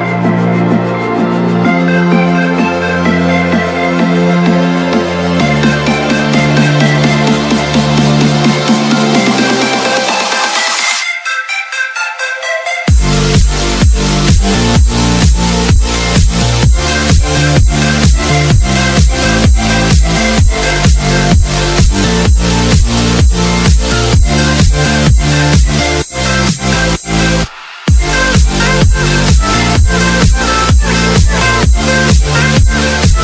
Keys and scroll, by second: 1.5 Escape, 4.7 ctrl+r, 9.2 t, 11.7 Escape, 12.5 F4, 30.0 shift+F2.